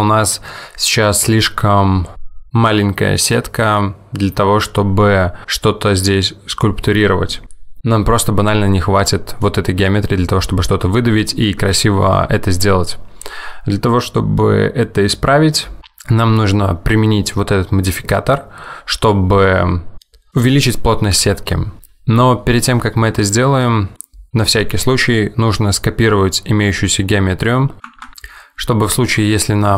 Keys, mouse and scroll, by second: 9.2 middle click, 23.3 middle click, 23.9-25.8 scroll down 1, 27.9 Tab.